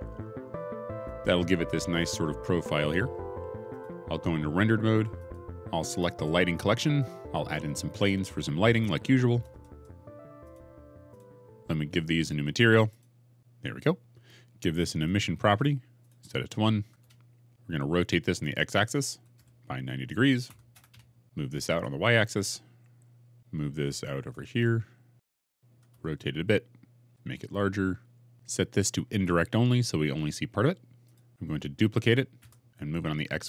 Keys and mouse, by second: 3.6 click, 6.8 click, 9.4 shift+a, 13.3 0, 15.9-16.9 drag, 19.0 r, 19.2 x, 20.4-22.3 typing, 20.8 KP_Enter, 23.5 g, 24.1 shift+z, 25.6 r, 25.8 z, 27.1 s, 32.3 shift+d, 32.6 shift+z.